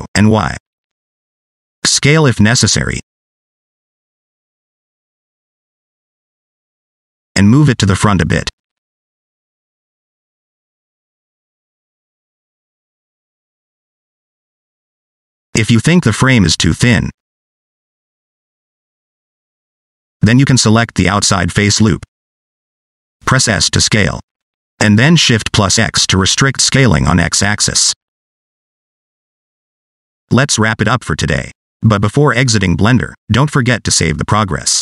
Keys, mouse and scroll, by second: 1.8 scroll down 2, 2.3 middle click, 2.4 scroll up 1, 2.8 s, 3.7 middle click, 3.9 scroll up 1, 4.0 s, 5.3 middle click, 5.8 s, 6.6 middle click, 7.0 s, 7.3 middle click, 8.0 middle click, 8.6 click, 10.8 middle click, 11.7 Tab, 12.0 scroll down 2, 12.2 middle click, 14.1 scroll up 2, 14.3 middle click, 15.1 d, 15.4 click, 16.5 d, 17.4 ctrl+z, 17.8 middle click, 18.1 scroll up 2, 18.3 Tab, 18.8 middle click, 19.2 scroll up 2, 19.3 middle click, 20.8 alt+click, 21.4 middle click, 21.7 scroll down 1, 22.2 shift+middle click, 22.4 middle click, 23.6 s, 30.5 Tab.